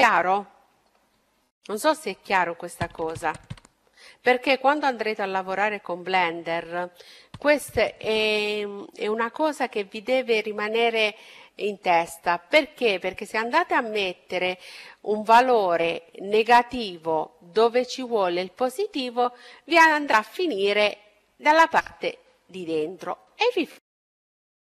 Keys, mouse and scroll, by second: 23.2-24.7 middle drag.